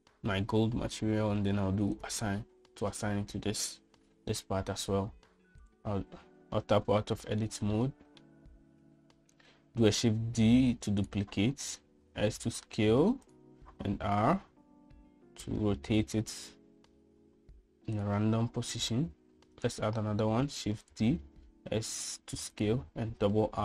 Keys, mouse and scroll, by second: 3.0 click, 6.8 Tab, 8.1-8.5 shift+middle drag, 8.8-9.3 middle drag, 10.9 shift+d, 13.0 s, 14.9 r, 20.6 shift+d, 22.5 s.